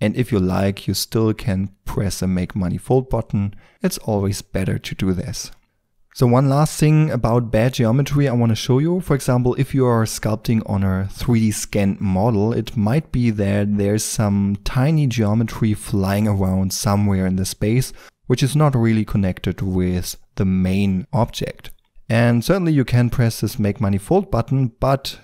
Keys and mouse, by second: 3.6 middle click, 4.8-5.5 middle drag, 5.8 Tab, 5.8 shift+d, 5.8 s, 21.7-22.8 middle drag, 22.8-25.2 drag.